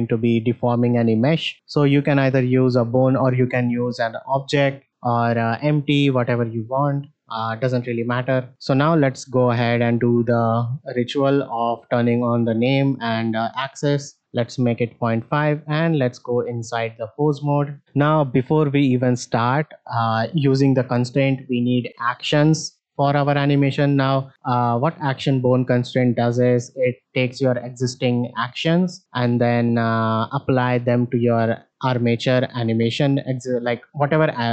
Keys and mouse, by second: 4.3 shift+middle click, 6.2 middle click, 7.8 shift+middle click, 9.3 click, 11.1 click, 12.7 click, 13.4-14.6 drag, 15.3 middle click, 17.4 shift+middle drag, 17.8-18.1 middle drag.